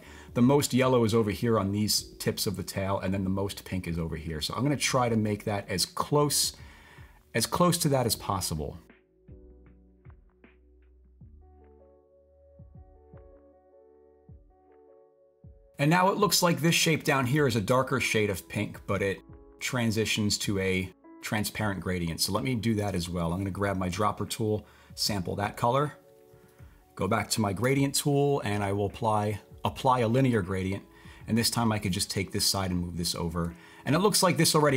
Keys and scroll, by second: 17.5-18.2 typing, 23.9 typing, 27.6 typing.